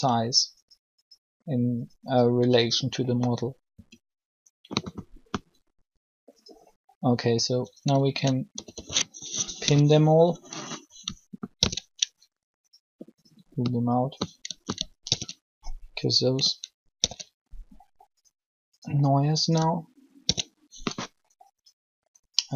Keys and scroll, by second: 3.7 s, 8.3 ctrl+a, 8.8-9.4 typing, 11.5 ctrl+l, 14.7 ctrl+l, 16.9 ctrl+l, 20.0 ctrl+l.